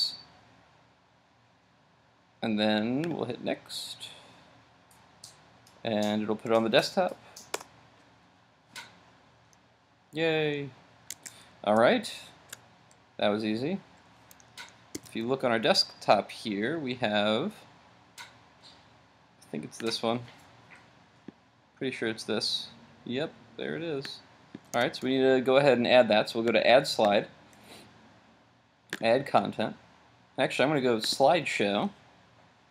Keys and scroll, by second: 11.1 super+Tab.